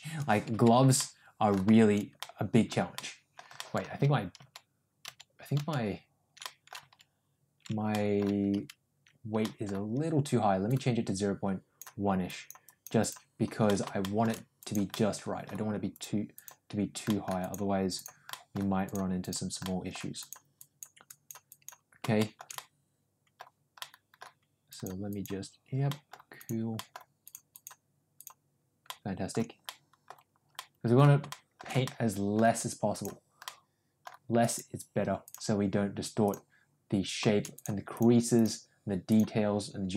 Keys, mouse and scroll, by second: 0.7-6.2 ctrl+z, 0.9 middle click, 2.1 middle click, 2.9 middle click, 3.5-6.2 ctrl+middle drag, 6.3 middle click, 7.8 middle click, 9.3 middle click, 10.5-11.7 drag, 12.2 click, 12.6 click, 12.9 click, 13.6 middle click, 13.9 shift+middle click, 14.5 click, 14.8 middle click, 15.8 click, 16.3 click, 17.0 middle click, 17.3 click, 17.8 click, 18.2 middle click, 18.8 click, 19.2 click, 19.6 middle click, 20.2 click, 20.6 click, 21.0 click, 21.5 click, 22.1 shift+middle click, 22.5 middle click, 23.7 middle click, 24.6 click, 25.1 click, 25.8 middle click, 26.3 click, 26.7 middle click, 27.2 click, 27.5 click, 28.1 click, 28.8 middle click, 29.6 middle click, 30.5 middle click, 31.2 shift+middle click, 31.8 middle click, 32.8 click, 33.3 middle click, 34.3 click, 35.2 click, 36.1 click, 37.5 click, 37.9 click, 38.3 click, 39.0 click.